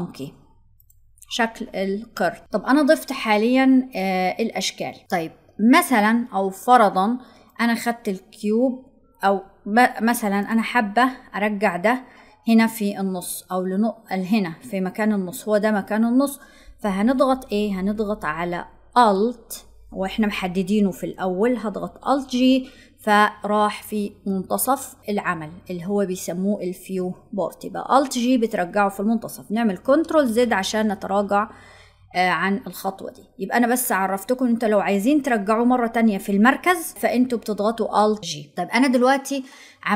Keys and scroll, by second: 18.9 alt+g.